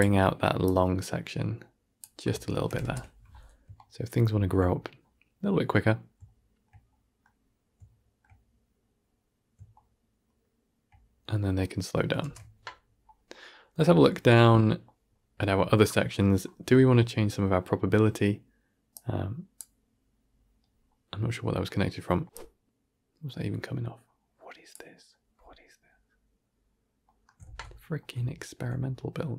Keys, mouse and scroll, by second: 0.0-2.6 drag, 2.6 shift+Left, 2.7 shift+space, 3.7-7.3 shift+middle drag, 7.3-7.8 scroll down 1, 7.8-10.0 shift+middle drag, 12.2 shift+space, 18.8-19.5 drag.